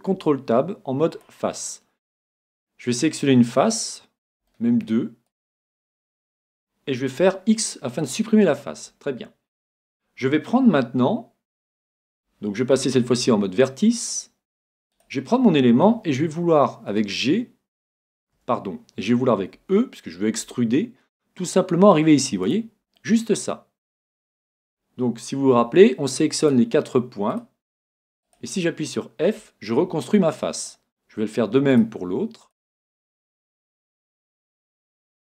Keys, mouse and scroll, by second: 0.1 ctrl+t, 1.1 ctrl+t, 2.0 right click, 3.1 middle click, 4.5-6.2 middle drag, 5.3 right click, 7.2 x, 8.7 x, 13.0 ctrl+t, 14.9 right click, 16.9 g, 19.5 e, 22.6-24.3 drag, 23.0-24.9 middle drag, 26.4-30.1 right drag, 29.4 f, 30.3-32.0 middle drag, 31.7-35.3 right drag, 35.0 f.